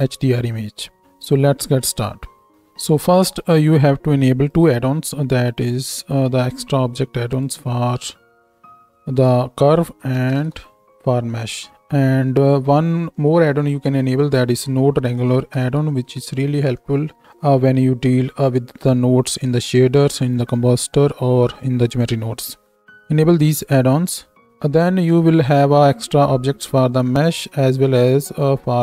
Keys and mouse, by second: 2.3 space, 24.8 shift+a.